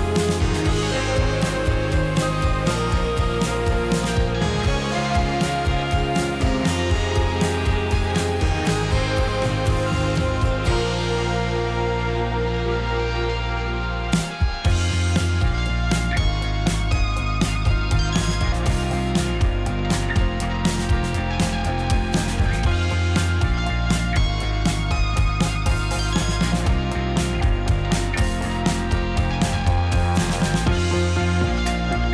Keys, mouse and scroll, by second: 2.9-4.1 middle drag, 5.0 middle click, 5.3 click, 6.4 click, 6.8 click, 8.0 shift+click, 8.9 s, 11.1 click, 11.9 s, 13.1 click, 13.3-14.5 middle drag, 14.5 click, 15.0 shift+click, 15.3 shift+click, 15.6-17.3 middle drag, 17.7 g, 23.5 shift+click, 24.1 shift+click, 24.7 shift+click, 25.1 shift+click, 25.3 shift+click, 25.8 shift+click, 26.1 shift+click, 26.4 middle click, 27.0 shift+click, 27.6 middle click, 28.5 g, 29.9 click, 30.1-32.1 middle drag.